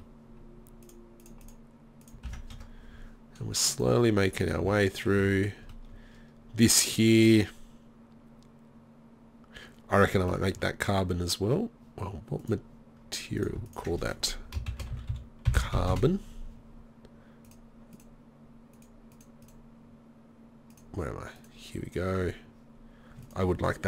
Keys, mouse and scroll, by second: 0.5 middle click, 0.9-3.8 drag, 4.7 z, 5.2 z, 5.4-5.8 drag, 5.9 middle click.